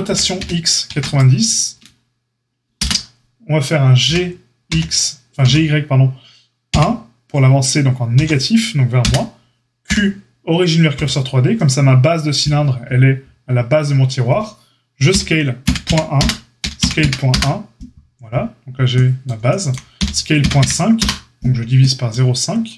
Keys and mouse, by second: 0.0 r, 4.0 g, 9.8 q, 15.0 s, 16.5 s, 19.9 s.